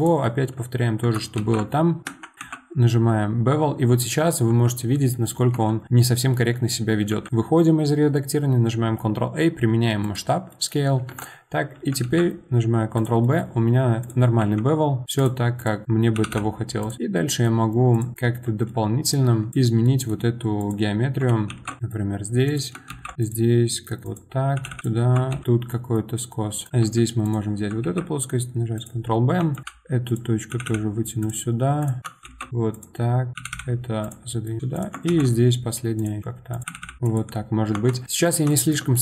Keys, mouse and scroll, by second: 1.4 ctrl+shift+b, 2.4 ctrl+b, 5.1 middle click, 5.5 Tab, 5.8-7.1 middle drag, 7.1 ctrl+a, 10.5-11.1 middle drag, 11.1 Tab, 12.0 ctrl+b, 14.1 click, 14.4 1, 15.2 click, 15.6 click, 16.1 g, 17.9 click, 18.1-18.6 scroll up 2, 18.6 middle click, 19.5 click, 19.8 middle click, 20.6 click, 21.5 ctrl+shift+b, 22.6 click, 22.9 ctrl+shift+b, 24.2 click, 24.6 g, 24.8 click, 25.3 ctrl+shift+b, 26.7 middle click, 26.8 2, 27.2 click, 27.8 ctrl+b, 29.5 click, 30.1 click, 30.5 g, 31.8 click, 32.0 middle click, 32.2 ctrl+shift+b, 32.8 click, 33.3 click, 33.3 g, 34.3 middle click, 34.7 click, 35.1 ctrl+shift+b, 36.6 click, 36.6 g, 37.5 scroll down 2, 37.7 Tab, 37.9-39.0 middle drag.